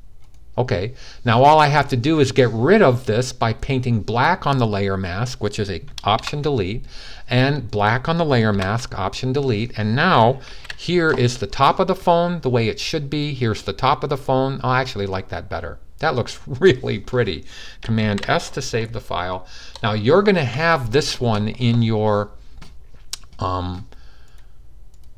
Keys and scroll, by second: 10.2 alt+super+d, 17.7 super+s.